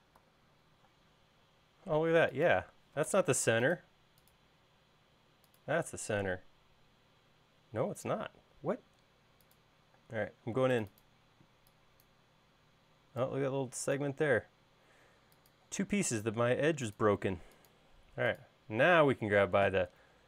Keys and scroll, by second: 3.3 m, 10.3 space, 11.6 e, 14.7 l, 17.7 space, 19.1 m.